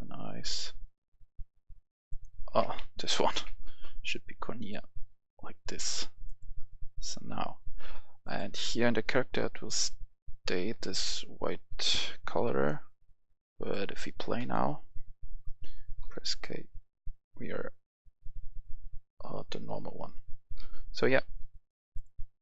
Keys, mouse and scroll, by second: 3.2 c, 3.4 o, 3.5 r, 4.6 click, 9.0 right click, 9.2 w, 9.6 w, 10.7 d, 11.6 s, 12.0 w, 12.4 s, 13.6 click, 15.1 w, 16.0 k, 19.6-21.0 typing, 21.4 Escape, 21.9 click.